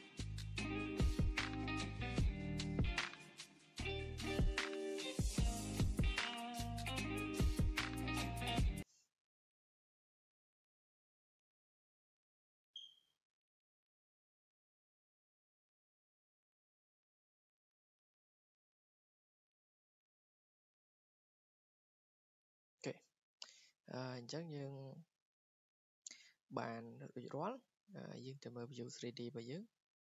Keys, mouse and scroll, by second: 0.4 scroll, 0.6 click, 0.9 Delete, 1.5 click, 2.2 click, 2.6 click, 3.2 click, 3.5 click, 3.7 click, 4.0 Escape, 4.4-4.8 scroll, 6.3-7.7 drag, 7.7-8.4 scroll, 8.4 click, 8.6 Delete, 10.5 click, 11.3 Escape, 14.4 click, 15.7 click, 18.2-18.5 scroll down 5, 19.4 scroll, 19.5 click, 20.5 click, 21.4-22.6 scroll down 10, 22.6-22.9 drag, 22.9-23.5 scroll up 3, 23.5 scroll, 24.1 scroll, 26.7 click, 27.3 scroll down 2, 28.7 click, 29.7 click.